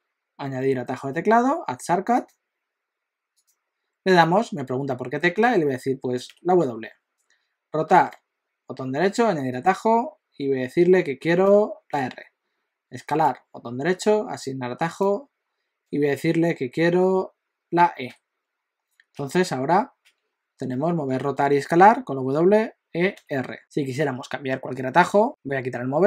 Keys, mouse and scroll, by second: 8.0 right click, 13.1 right click, 19.1-22.1 typing, 23.2 r, 25.3 click.